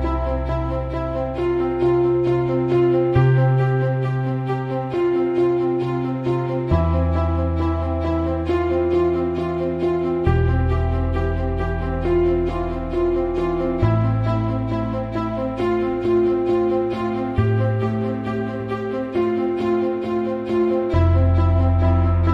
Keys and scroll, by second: 1.7 KP_2, 2.4 Return, 6.9 ctrl+KP_0.